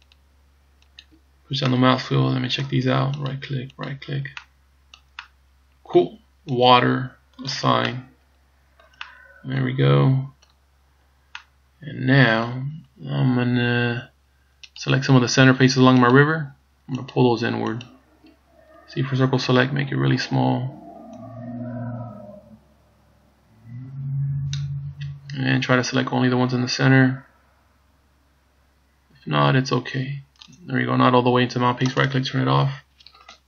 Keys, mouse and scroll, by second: 0.2 shift+right click, 1.0 shift+right click, 1.7 middle click, 3.3 shift+right click, 3.9 shift+right click, 4.4 middle click, 5.4 middle click, 6.7 click, 7.5 click, 8.0 middle click, 8.5 middle click, 9.1 middle click, 11.0 scroll down 3, 11.4 middle click, 12.7 scroll down 1, 14.9 right click, 16.2 shift+right click, 17.2 shift+right click, 17.9 shift+right click, 18.9 c, 32.2 right click, 32.5 scroll down 1.